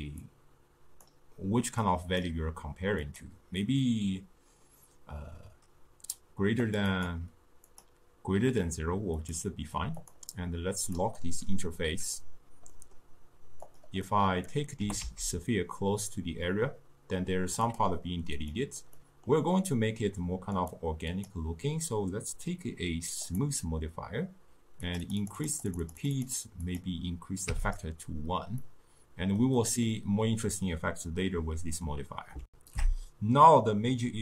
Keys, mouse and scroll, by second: 1.2-6.8 drag, 7.9-9.4 drag, 10.2 click, 13.9 click, 14.2-14.9 middle drag, 14.9 g, 18.6 click, 19.1-21.2 middle drag, 23.5-28.7 drag, 28.7-32.5 middle drag, 32.5 ctrl+alt+shift+q.